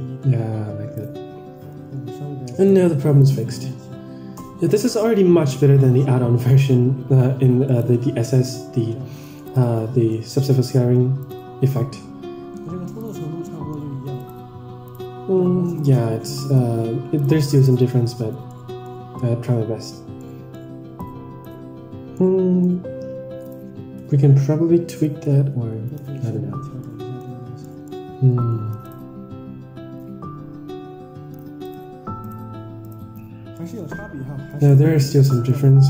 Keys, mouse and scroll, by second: 2.5 click, 9.4 ctrl+shift+click, 9.9 scroll down 3, 10.1 middle click, 11.2 ctrl+shift+click, 12.9 click, 13.4 middle click, 14.1 ctrl+shift+click, 14.8 ctrl+shift+click, 15.7 ctrl+shift+drag, 16.4 ctrl+shift+click, 17.5 ctrl+shift+click, 18.0 Tab, 18.4 middle click, 19.1 middle click, 20.1 middle drag, 20.9-21.4 drag, 22.1 middle click, 22.6 scroll down 2, 23.3-24.5 drag, 24.8-26.5 drag, 26.7-27.2 middle drag, 27.6 middle click, 28.2 Tab, 29.0 ctrl+shift+click, 30.1-30.7 scroll up 4, 30.7-31.1 scroll down 2, 31.6 ctrl+shift+click, 32.2 ctrl+shift+click, 32.8 ctrl+shift+click, 33.3 scroll down 1, 33.5-33.8 middle drag, 34.0-34.3 scroll up 4, 34.7 ctrl+shift+click, 35.1-35.5 middle drag, 35.1 scroll down 1.